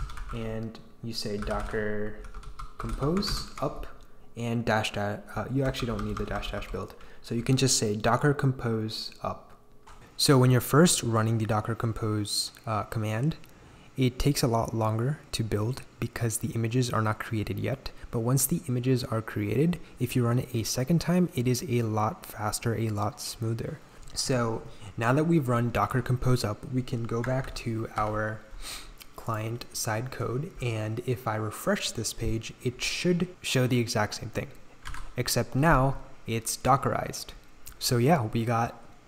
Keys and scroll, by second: 0.0-3.4 typing, 5.3 BackSpace, 5.6 BackSpace, 6.0 BackSpace, 6.4 BackSpace, 27.7 ctrl+j, 28.5 ctrl+j, 34.9 super+r.